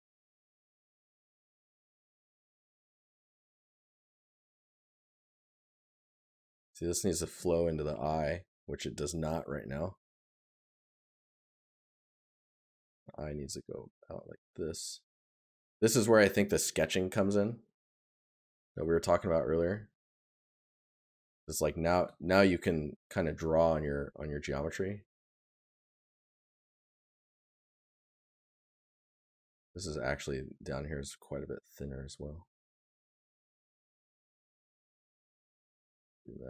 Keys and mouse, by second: 26.5 right click, 32.3 right click, 34.9 right click.